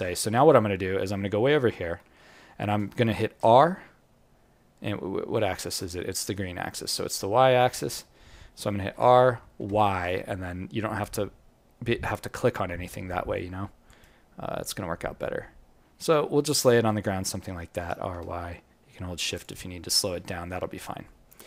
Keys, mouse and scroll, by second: 1.1-1.5 scroll up 5, 1.7 alt+middle click, 2.1 scroll up 1, 4.7 scroll down 1, 4.7-5.4 scroll down 12, 5.4 alt+middle click, 6.7-7.0 scroll up 5, 7.1 alt+middle click, 7.6-7.9 scroll up 1, 8.3-8.9 scroll down 1, 8.9-9.5 scroll down 1, 8.9 r, 14.5-15.7 scroll up 6, 15.8-16.9 scroll down 13, 16.6-17.4 scroll up 3, 17.7-18.1 scroll up 4, 19.8-20.8 scroll down 25, 20.8 alt+click.